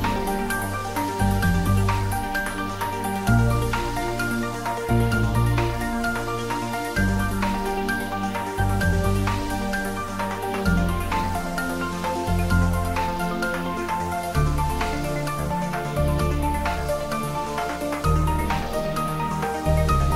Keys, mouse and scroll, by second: 0.7 click, 1.4 g, 2.1 click, 2.4 s, 3.0 click, 3.3 g, 3.6 Right, 4.0 Up, 4.9 Return, 5.6 click, 6.8 g, 9.2 click, 9.5 s, 10.6 click, 10.9 s, 13.0 click, 13.4 f, 17.4 click.